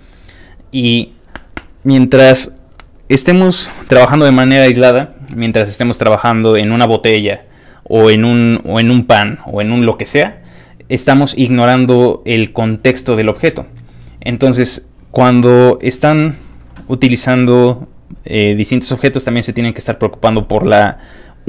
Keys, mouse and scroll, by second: 17.9 click, 18.3 click, 18.7 click.